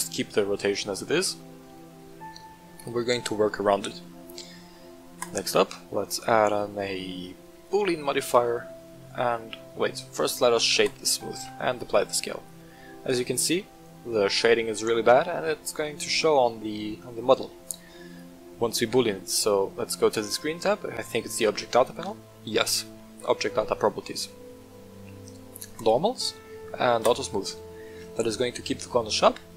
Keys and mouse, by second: 1.0 middle drag, 2.3 shift+middle drag, 5.2-7.7 drag, 8.7 middle click, 9.4 shift+middle click, 10.2 right click, 10.4 w, 11.3 ctrl+a, 12.5-13.3 middle drag, 18.1 click, 25.7 click, 27.0 click.